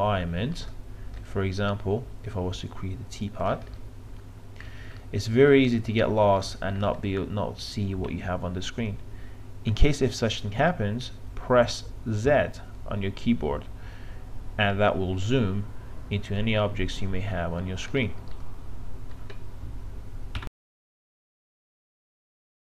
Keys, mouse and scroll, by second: 1.2 click, 3.4 w, 4.4-5.0 scroll down 1, 5.0 middle click, 6.4 middle click, 7.0 click, 12.2 z, 18.4 alt+middle click.